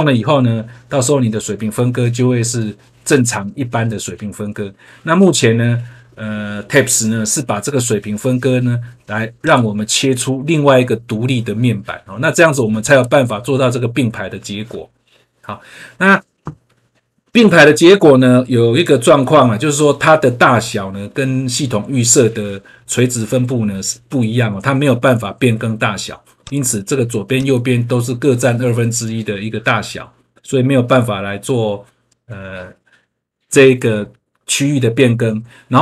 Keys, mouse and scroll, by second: 12.8 click, 18.5 scroll down 1, 26.4 click, 27.3 click.